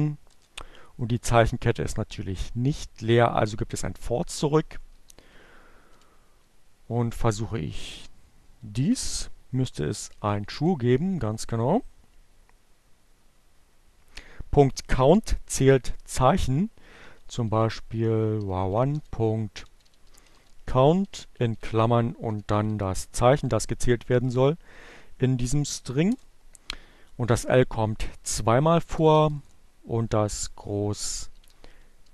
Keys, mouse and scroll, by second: 2.7 shift+2, 4.9-6.1 typing, 7.3-8.3 typing, 10.1 shift+Return, 15.1-16.1 typing, 17.6-19.1 typing, 20.4-21.6 typing, 25.5 Return, 28.0 Up, 28.2 BackSpace, 29.5 shift+2, 30.5 shift+2, 30.9 shift+Return.